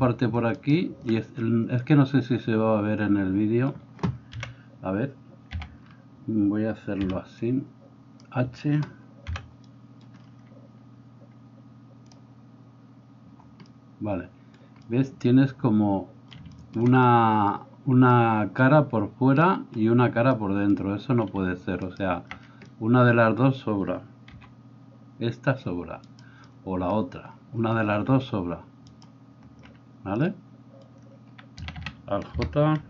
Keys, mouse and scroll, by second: 0.6 alt+shift+middle click, 0.6 alt+shift+right click, 4.4 KP_1, 5.6 a, 7.0 b, 9.4 h, 21.8 alt+middle click, 21.8 alt+right click, 24.3 g, 31.6 a, 31.9 a.